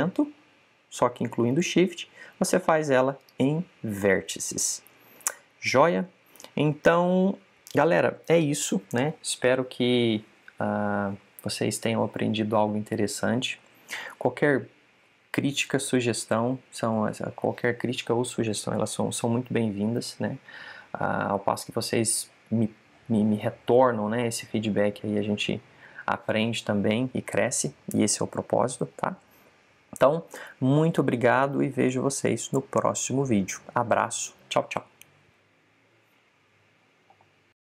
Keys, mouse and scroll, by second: 36.8 click.